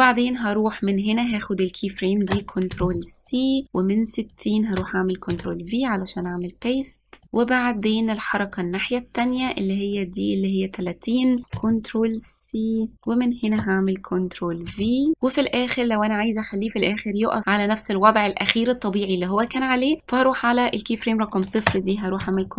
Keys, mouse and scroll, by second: 2.8 ctrl+c, 3.4-5.4 drag, 5.4 ctrl+v, 7.2-9.5 drag, 10.0-11.6 drag, 11.6 ctrl+c, 12.4-14.8 drag, 14.8 ctrl+v, 19.5 click, 22.3 ctrl+c.